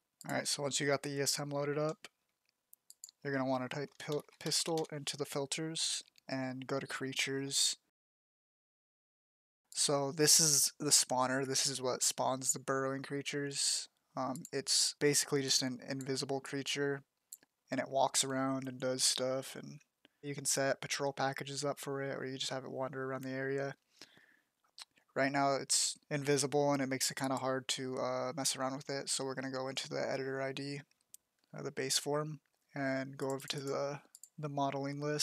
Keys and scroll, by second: 3.6-5.2 typing.